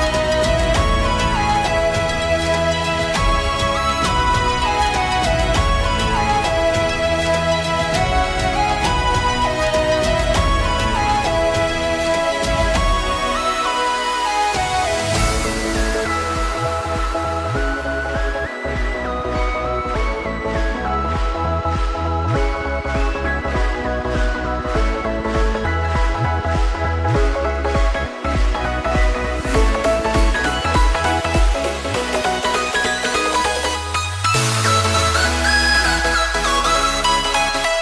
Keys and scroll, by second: 3.1 Delete, 4.2 Delete, 17.6 i, 23.0 ctrl+z, 23.9 ctrl+z, 24.2 ctrl+z.